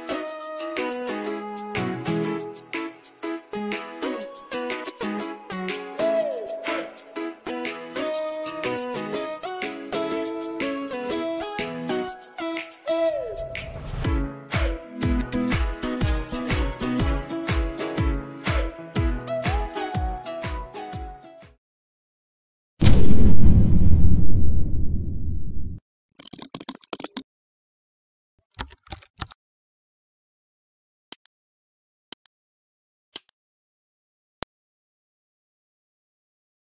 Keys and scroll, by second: 0.4 KP_3, 0.6 KP_1, 0.8 KP_2, 2.0 Return, 17.5 ctrl+alt+o.